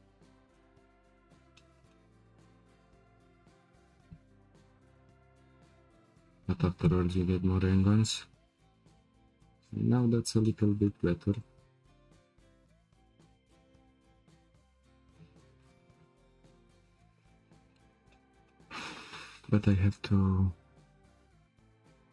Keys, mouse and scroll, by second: 9.0 k, 9.1 Tab, 9.6 click, 10.0 Tab, 10.4-11.4 shift+middle drag, 11.4 click, 12.4 g.